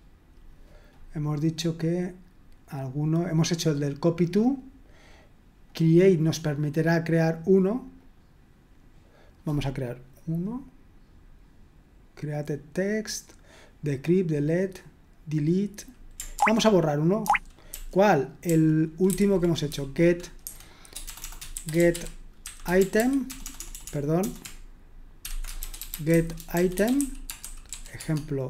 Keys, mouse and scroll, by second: 1.0-1.8 scroll up 1, 2.4-3.8 scroll up 1, 4.1-7.1 drag, 8.0-16.3 drag, 16.3 ctrl+o, 17.2 ctrl+o, 17.7 ctrl+p, 18.5 ctrl+p, 20.4-23.9 typing, 25.0-28.4 typing.